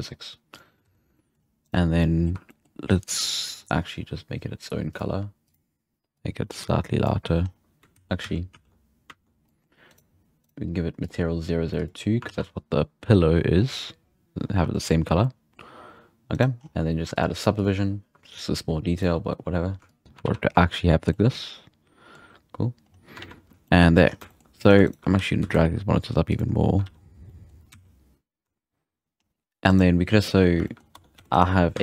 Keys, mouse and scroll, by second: 0.8 alt+a, 1.0 scroll down 2, 1.1 middle click, 1.3 scroll up 1, 1.6-2.0 right drag, 2.0-2.4 middle drag, 2.4-3.5 shift+scroll up 4, 2.7 shift+middle click, 3.5-4.9 scroll down 2, 4.9-5.5 drag, 7.4-7.9 scroll up 3, 8.0 ctrl+z, 8.3 ctrl+z, 8.6 ctrl+z, 9.4-9.9 middle drag, 9.9-10.6 right drag, 11.0 click, 12.2 alt+a, 12.4-13.4 scroll down 6, 13.4-14.1 scroll up 5, 14.1 scroll down 1, 14.7-15.8 shift+middle drag, 15.8-16.3 scroll down 2, 16.3 right drag, 16.6-17.2 scroll up 5, 17.1 click, 17.5-20.2 drag, 20.0 scroll down 2, 20.2 alt+a, 20.9 scroll down 1, 21.1-22.1 middle drag, 22.1-22.8 scroll up 3, 22.8-23.6 scroll down 7, 23.1 alt+a, 23.6-24.0 shift+middle drag, 24.0 scroll up 4, 24.2-24.5 shift+middle drag, 24.5-25.2 right drag, 25.1 g, 26.8 alt+a, 26.9 scroll down 3, 27.2-27.8 middle drag, 27.7 z, 28.8-29.1 scroll down 1, 29.1-29.7 scroll up 1, 29.7 right click, 30.5 scroll down 1, 30.6 shift+middle click, 30.7 scroll up 1, 30.9 Tab, 31.1 3, 31.3-31.7 right drag, 31.7 z.